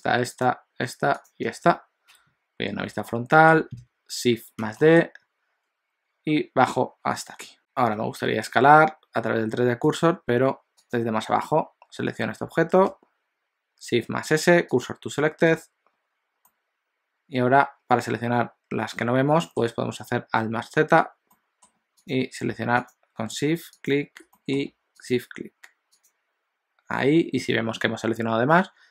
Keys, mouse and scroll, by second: 0.6 click, 1.3 shift+click, 2.1 KP_1, 3.1 shift+middle click, 4.6 shift+d, 7.6 shift+middle click, 8.0 s, 10.8 click, 12.9 shift+s, 16.5 middle click, 20.5 alt+z, 21.5 middle click, 22.3 click, 22.8 shift+click, 23.8 click, 24.4 middle click, 25.1 shift+click, 25.9 shift+click.